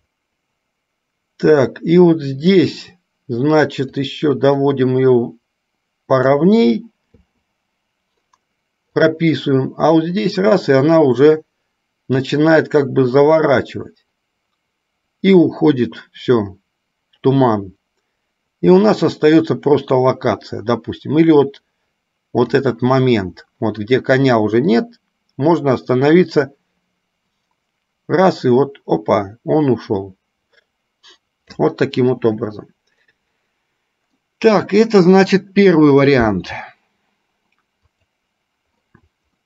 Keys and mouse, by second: 4.0 click, 4.4-6.7 drag, 9.1-22.7 drag, 24.9-31.7 drag, 34.4-35.4 middle drag, 38.0 click.